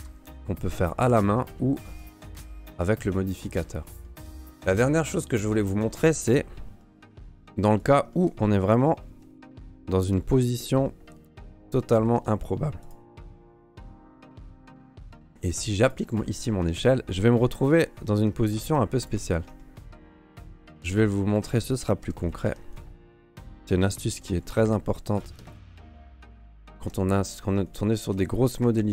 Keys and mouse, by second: 0.7 Tab, 1.1 Tab, 1.9 click, 2.4 click, 2.7 g, 3.9 alt+click, 4.3 g, 4.4 Tab, 5.9 right click, 6.8 middle drag, 7.3 shift+d, 8.1 shift+middle drag, 8.8 middle click, 9.1 r, 10.6 middle drag, 11.1 r, 11.8 middle drag, 12.1 r, 13.1 middle drag, 13.5 r, 14.7 shift+middle click, 14.9 middle drag, 15.3 ctrl+a, 18.5 g, 19.3 shift+middle click, 19.6 middle click, 20.5 g, 21.3 right click, 22.0 h, 22.2 right click, 22.5 h, 23.0 right click, 23.0 click, 24.1 g, 25.5 shift+middle click, 26.1 click, 26.4 Tab, 27.6 alt+click, 28.6 Delete.